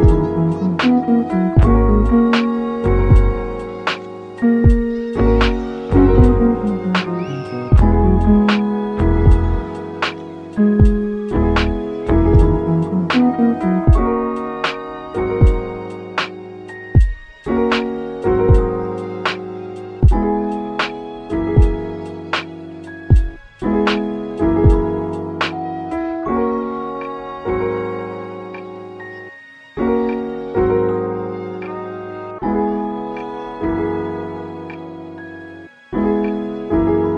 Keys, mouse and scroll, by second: 0.7 click, 1.4-2.0 scroll up 2, 2.0 scroll up 1, 2.0 ctrl+r, 2.6 click, 5.6 s, 6.7 0, 7.2 Return, 8.5 g, 8.8 z, 9.7 click, 10.8 ctrl+r, 11.1 ctrl+click, 14.3 click, 14.6 middle click, 15.1 Tab, 15.4 middle click, 16.0 s, 18.1 click, 18.5-20.0 right drag, 19.6 click, 20.0-21.5 middle drag, 21.5 g, 21.9 z, 22.7 click, 22.9-25.1 middle drag, 25.1 g, 25.4 z, 27.6 click, 27.8 middle click, 28.3 scroll up 2, 28.7 s, 30.0 click, 31.4 scroll down 2, 31.5 middle click, 32.0 g, 32.3 z, 32.8 click, 33.0-34.5 middle drag, 34.5 Tab, 34.8 middle click, 35.1 3, 35.3 click, 36.3 i.